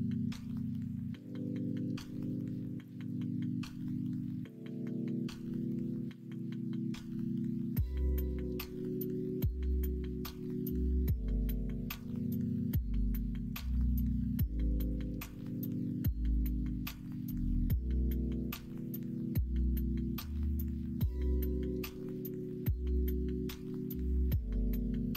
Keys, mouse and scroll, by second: 1.5 shift+middle click, 16.9 shift+middle click.